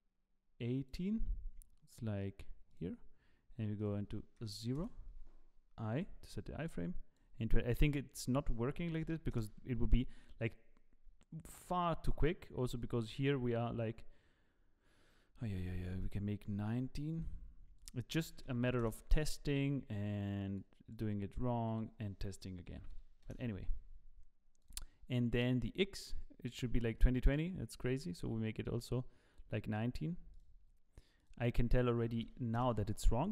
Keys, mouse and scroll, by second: 1.1 click, 2.7 click, 3.8 click, 5.1 i, 6.6 click, 8.2 click, 9.7 i, 11.4 click, 12.6 click, 17.1 click, 17.7 click, 19.2 i, 20.5 click, 21.6 click, 24.6 click, 27.7 click, 30.3 click, 32.7 click.